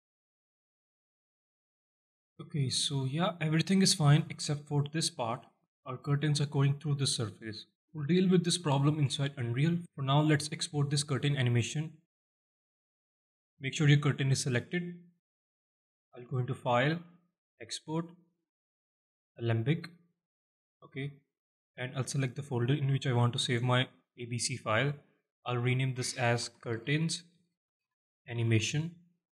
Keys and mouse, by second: 1.9-2.7 alt+shift+middle drag, 4.2-5.0 alt+shift+middle drag, 7.0-7.4 alt+shift+middle drag, 7.4-8.0 middle drag, 8.8 middle drag, 9.3-9.7 alt+shift+middle drag, 10.2 alt+middle click, 10.7 middle drag, 11.2-11.6 alt+shift+middle drag, 11.6 middle click, 12.4-12.8 shift+middle drag, 13.2 shift+middle drag, 16.3-19.4 drag.